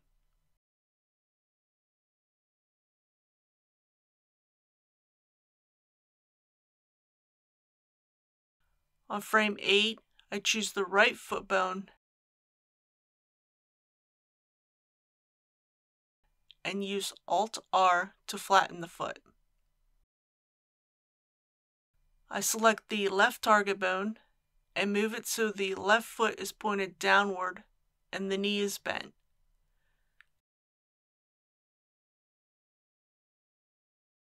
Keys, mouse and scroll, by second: 2.2-9.5 drag, 15.0 middle click, 15.5 KP_3, 17.0 alt+r, 19.9-20.3 scroll up 1, 21.2-22.3 middle drag, 25.1 click, 27.3-29.3 middle drag, 29.7 KP_3, 33.8 g.